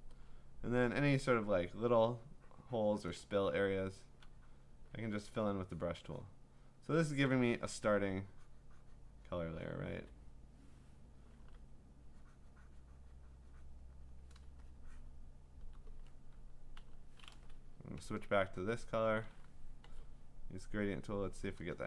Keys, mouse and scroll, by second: 1.6 click, 3.1 click, 3.6-4.2 ], 4.6 click, 6.2 click, 6.7 click, 8.5-9.9 `, 9.9 click, 9.9 `, 10.1 `, 11.4 b, 13.6 click, 14.1 click, 15.6 click, 16.8 b, 18.7 alt+click, 19.9 g, 20.8 click.